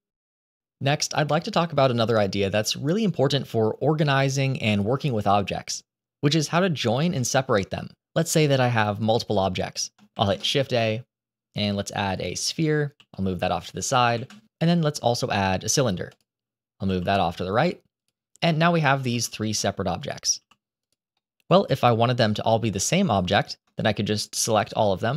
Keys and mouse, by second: 10.0 shift+a, 12.8 g, 14.0 shift+a, 16.7 g, 18.4-18.8 middle drag, 19.0 g, 20.0 click, 20.2 g, 21.1-21.5 middle drag, 24.4 shift+middle click.